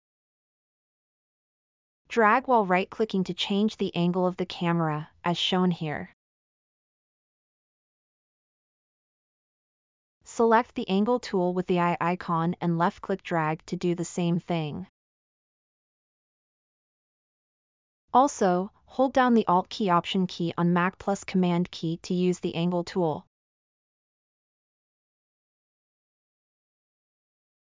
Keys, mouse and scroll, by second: 5.8 middle click, 8.5-9.5 middle drag, 21.0 super+click, 21.0 super+right click.